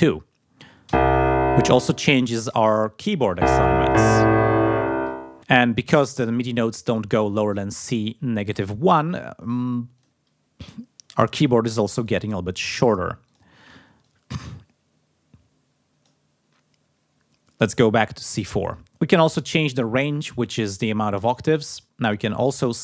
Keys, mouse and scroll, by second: 9.9 click, 11.1 click, 11.9 click, 12.7 click, 13.2 click, 14.0-16.2 drag, 18.9 click, 21.2 click, 21.8-22.8 drag.